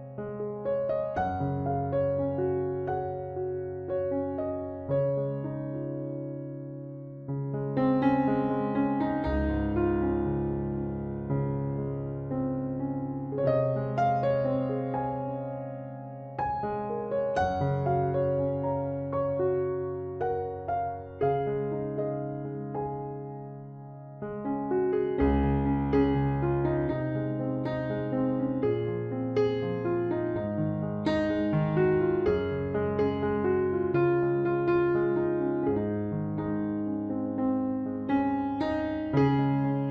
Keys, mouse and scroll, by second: 1.0-4.5 right drag, 1.9 c, 3.3 e, 5.1 middle click, 6.7-8.6 right drag, 8.5 c, 9.7-11.5 right drag, 10.6 c, 11.5 middle click, 14.8-16.2 middle drag, 16.2 click, 16.2 c, 16.8-17.9 middle drag, 18.9 right click, 19.6-21.6 drag, 19.8 c, 22.2 click, 22.6 KP_Decimal, 23.9 e, 24.8 z, 25.5-27.3 drag, 27.7 z, 28.4 KP_1, 29.0 KP_Decimal, 29.9-31.2 middle drag, 31.2-34.1 drag, 34.8 KP_3, 35.0 z, 35.3-37.4 middle drag, 36.2 ctrl+s, 36.7 Tab, 37.8 z.